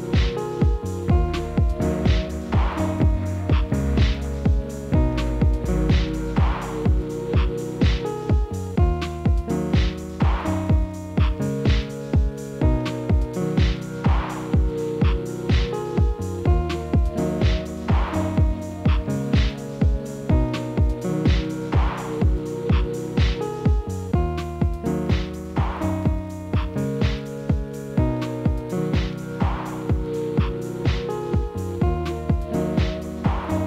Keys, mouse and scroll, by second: 1.4-2.0 scroll up 2, 2.0 ctrl+b, 3.3 middle click, 3.7 click, 4.3 3, 4.3 click, 4.8 e, 6.5-7.4 scroll down 1, 7.4 ctrl+r, 9.6 click, 10.2 3, 10.5 click, 11.0 KP_1, 11.5 e, 13.4-14.4 middle drag, 14.4 Tab, 14.9 KP_1, 15.4 alt+x, 16.0 click, 16.2-16.7 middle drag, 16.7 scroll down 2, 16.9-18.0 middle drag, 18.0 KP_1, 18.9-20.2 middle drag, 20.2-21.6 drag, 21.9-22.4 scroll up 1, 22.4-23.9 drag, 24.9-27.2 drag, 27.2-27.9 middle drag, 27.9-29.2 right drag, 29.2 scroll down 4, 29.8-30.2 scroll down 7, 30.2 click, 30.9 click, 31.2 middle click, 32.0-32.9 ctrl+z.